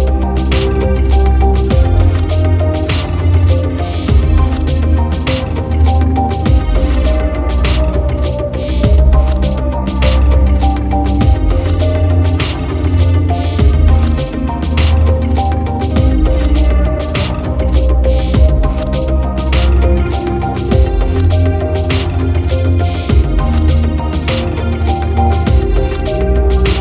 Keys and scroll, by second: 3.2 ctrl+j, 15.8 ctrl+t, 19.9 ctrl+t.